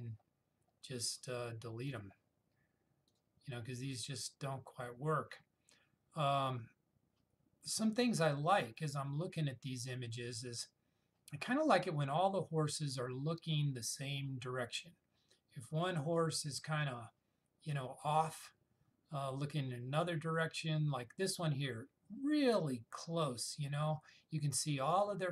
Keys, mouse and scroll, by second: 5.0-5.4 scroll down 1.